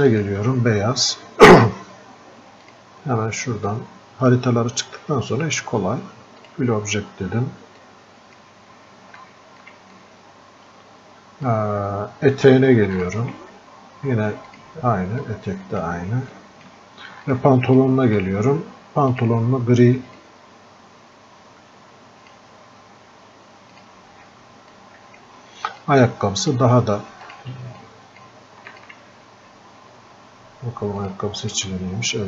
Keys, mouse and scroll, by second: 9.5 alt+click, 10.3-16.6 drag, 18.1-26.2 drag, 26.2-32.2 drag.